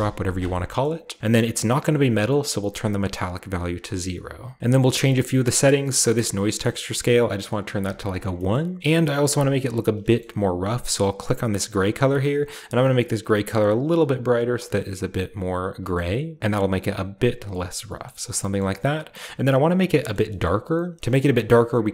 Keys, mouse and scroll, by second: 0.5-1.2 scroll down 1, 0.7-2.0 middle drag, 1.2-1.8 scroll up 1, 1.9-2.6 scroll up 1, 2.6-3.7 scroll up 1, 3.0-4.6 drag, 4.1-4.6 scroll down 1, 4.9-6.8 scroll up 1, 6.9-8.1 drag, 7.8 1, 8.2 click, 8.5 middle click, 8.6 scroll up 1, 9.2-11.3 middle drag, 9.8-11.2 scroll up 1, 11.2-12.0 shift+drag, 11.2 shift+scroll up 1, 12.1-12.7 drag, 15.4-16.5 drag, 15.8 middle click, 17.2-19.2 drag, 17.3-19.2 scroll down 1, 19.2-20.0 shift+middle drag, 19.2-21.9 shift+scroll up 1, 20.1 shift+middle drag, 20.5 shift+middle click, 21.1 middle click, 21.5-21.9 middle drag.